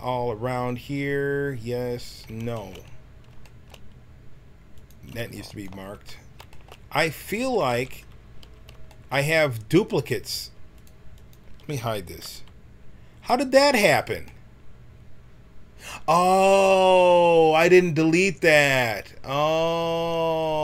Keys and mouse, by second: 0.1 middle click, 4.7-7.1 drag, 7.1 a, 7.3 a, 7.5 w, 8.3 a, 12.2 h, 14.9 middle click.